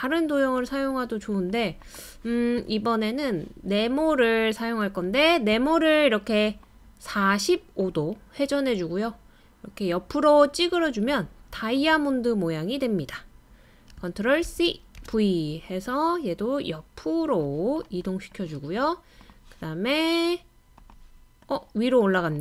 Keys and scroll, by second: 14.4 super+c, 15.0 super+v.